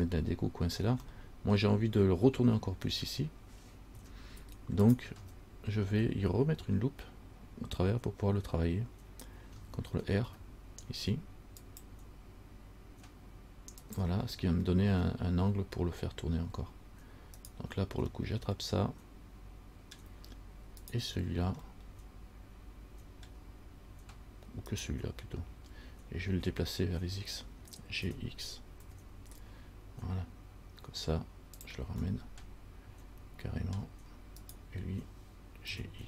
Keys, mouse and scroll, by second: 1.3 middle click, 4.2 Tab, 5.1 right click, 5.4 Tab, 10.3 ctrl+r, 17.6 right click, 18.4 middle click, 21.0 shift+right click, 22.0 middle click, 23.6-24.9 scroll down 1, 24.9 right click, 28.3 g, 32.3 middle click, 34.6 right click, 35.9 g.